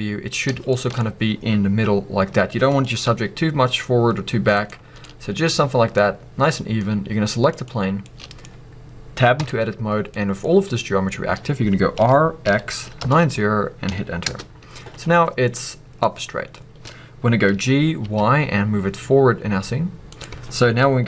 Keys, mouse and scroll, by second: 0.9-2.3 scroll up 2, 2.3-2.6 scroll down 2, 2.6 click, 3.0 g, 4.7 right click, 4.7 scroll down 1, 5.0-7.5 middle drag, 5.9-7.5 scroll up 2, 7.5 click, 8.0-20.2 middle drag, 8.5-9.4 scroll up 2, 9.4 b, 9.9 scroll down 2, 14.3 t, 16.9-17.5 scroll up 2, 20.2 click.